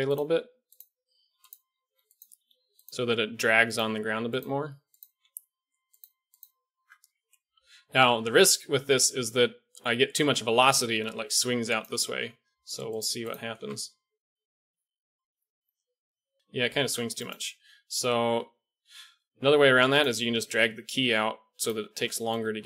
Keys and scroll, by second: 1.8 g, 2.3 r, 2.8 g, 3.9 r, 4.4 g, 5.1 r, 6.0 g, 6.7 Tab, 8.8-10.0 d, 10.1 d, 11.8 d, 13.5 alt+a, 16.9 alt+a, 20.2 g, 22.3 shift+Left.